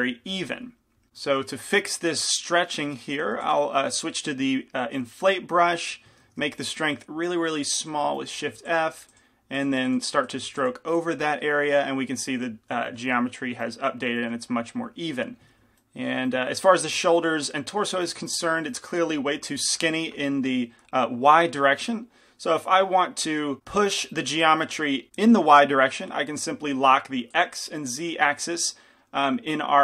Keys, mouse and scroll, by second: 1.4 middle click, 3.4 i, 3.4 f, 5.1-6.4 drag, 6.4 shift+f, 8.3-13.7 drag, 8.7 f, 12.8-17.0 middle drag.